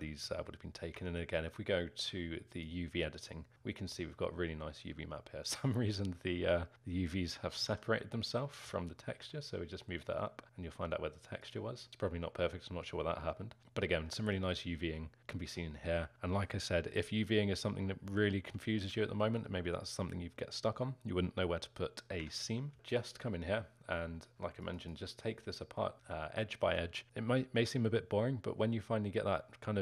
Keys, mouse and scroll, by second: 0.3 z, 1.1 Tab, 2.5 click, 7.6 a, 8.6 g, 18.5-19.1 scroll up 3, 19.1-22.3 alt+middle drag, 22.3 Tab, 22.7 Tab, 22.9 click, 24.3 2, 24.8 click, 26.1-29.8 alt+middle drag.